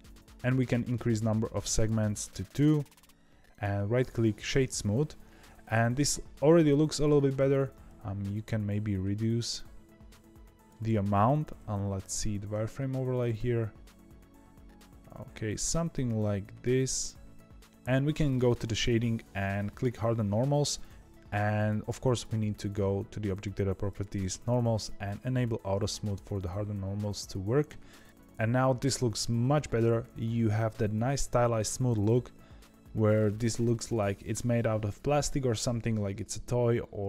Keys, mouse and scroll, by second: 1.7-2.9 drag, 2.9-3.4 scroll up 1, 3.4-5.7 right drag, 5.7-7.8 shift+middle drag, 7.8-10.8 shift+drag, 12.6-15.8 shift+drag, 17.6 ctrl+z, 18.3-19.8 drag, 22.0 click, 23.8-24.8 drag, 25.4-28.0 drag, 28.1 scroll down 1, 28.1-31.1 scroll up 1.